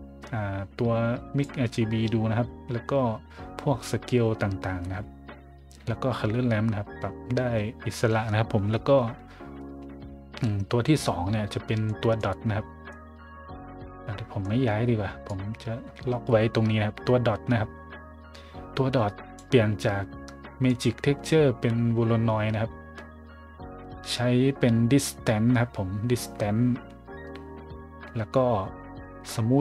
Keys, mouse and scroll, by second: 11.9 middle click, 12.2 middle click, 12.9-14.4 middle drag, 15.3-19.3 drag, 20.7 click.